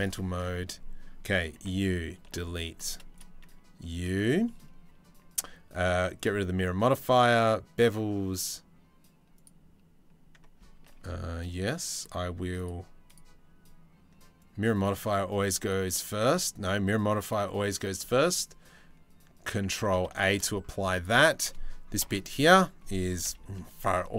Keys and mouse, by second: 0.2 Tab, 1.2 Tab, 2.0 Delete, 2.7 click, 3.4-3.7 drag, 4.0-4.9 drag, 5.7 click, 8.9 click, 10.5 ctrl+z, 11.7 click, 12.2 click, 14.0-14.5 drag, 15.2-17.5 drag, 19.5 ctrl+a, 19.8 shift+middle drag, 20.4 Tab, 20.6 click, 21.6 ctrl+l, 22.8 KP_3, 23.8 shift+click.